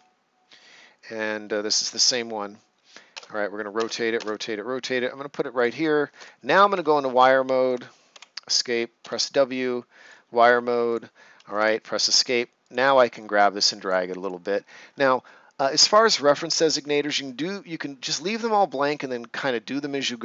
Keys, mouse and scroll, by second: 1.8 click, 3.1 space, 5.5 click, 6.7 w, 7.1 Escape, 9.9 click, 14.7 ctrl+scroll down 1, 15.2 right click.